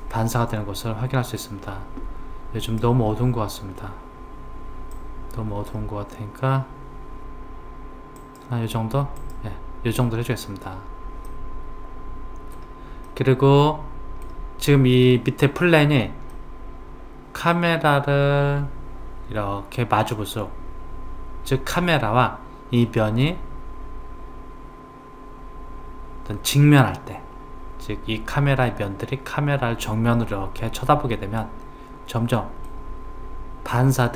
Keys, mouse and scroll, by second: 2.6 click, 9.2 click, 11.3-16.1 middle drag, 16.3-19.4 middle drag, 29.9-32.9 middle drag.